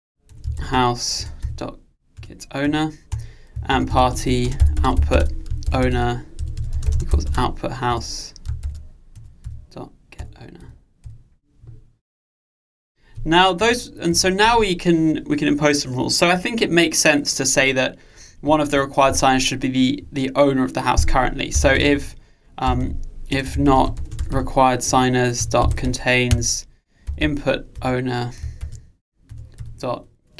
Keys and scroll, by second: 1.4 Return, 7.9 Return, 25.1 Return.